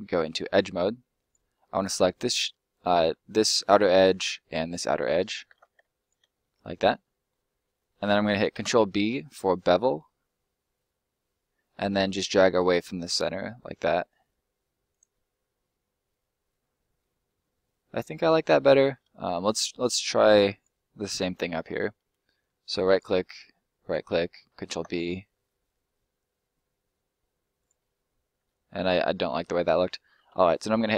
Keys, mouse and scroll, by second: 0.2 click, 1.1 right click, 1.5 middle click, 4.6 shift+right click, 5.3 ctrl+right click, 5.4 ctrl+z, 5.9 shift+right click, 6.4 middle click, 7.4 scroll down 1, 7.5 middle click, 8.2 ctrl+middle click, 8.5 ctrl+b, 14.8 click, 15.0 middle click, 17.2 middle click, 20.5 shift+right click, 22.9 right click, 23.2 shift+right click, 24.5 ctrl+right click, 24.7 ctrl+b, 27.6 click, 27.8 middle click, 28.4 ctrl+middle click, 28.7 ctrl+z, 29.2 middle click, 30.0 ctrl+middle click, 30.4 ctrl+l.